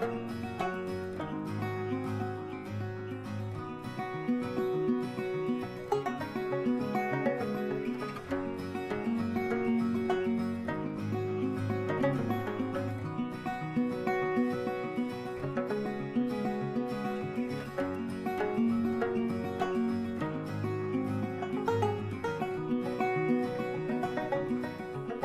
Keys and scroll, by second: 12.0 ctrl+j.